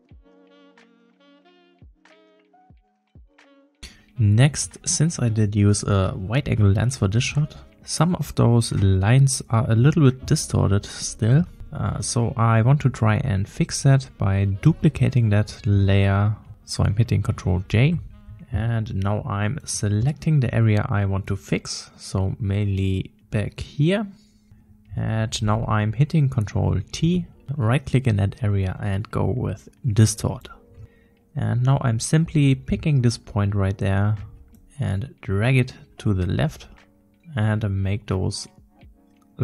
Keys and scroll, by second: 3.5 ctrl+j, 3.6 m, 17.6 ctrl+j, 23.1 ctrl+z, 27.0 ctrl+t, 33.0 \.